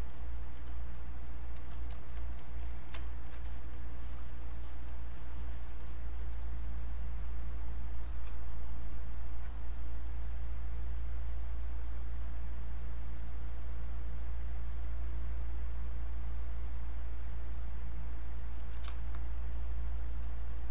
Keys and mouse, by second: 3.0 ctrl+right click, 3.4 ctrl+alt+click, 4.0 click, 5.1 click, 12.2 click, 14.8-18.9 drag, 18.9 space.